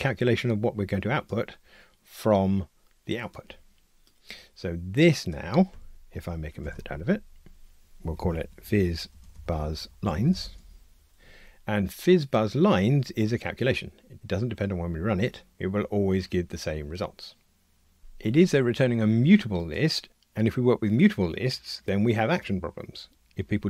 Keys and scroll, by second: 6.6 alt+super+m.